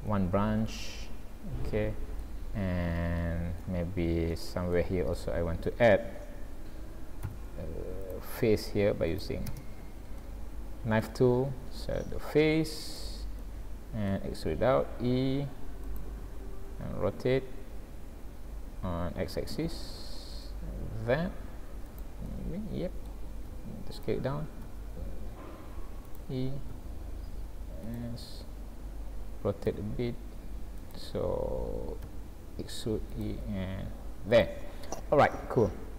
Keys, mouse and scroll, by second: 0.1 middle click, 2.7 scroll up 1, 3.2 shift+middle click, 4.0 scroll up 1, 4.3 middle click, 5.0-5.6 scroll up 1, 7.2 k, 10.2 middle click, 12.9 click, 13.4 middle click, 14.7 e, 16.8 r, 22.3 middle click, 23.5 s, 24.7 e, 26.7 s, 29.7 r, 32.1 e, 33.5 s, 34.7-35.1 scroll down 7, 35.3 middle click.